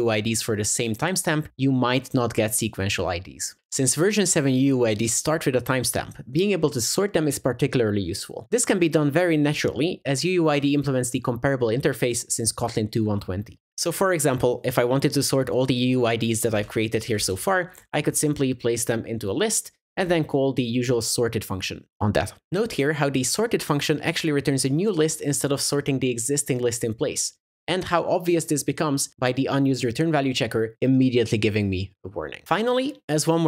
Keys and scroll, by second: 21.0 Return.